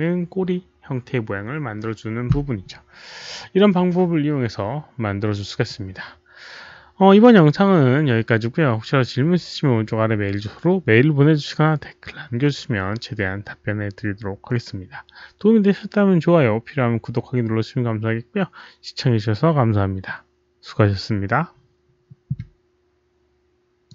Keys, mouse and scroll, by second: 23.8 click.